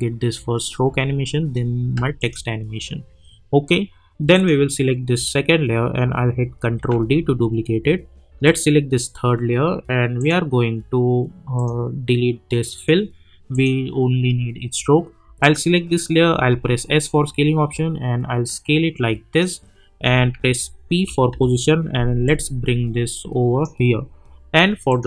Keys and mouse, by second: 0.8 space, 2.2 click, 6.7 ctrl+d, 8.4 click, 16.3 s, 17.0-21.3 drag, 21.3 p, 22.2-24.9 drag.